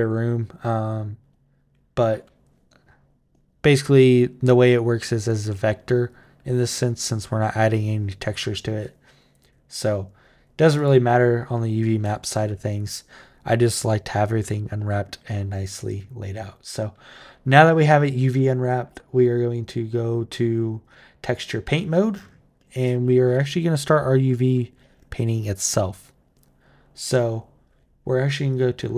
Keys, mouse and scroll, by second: 10.5 click, 13.4 click, 19.1 click, 20.6 click, 28.3 click.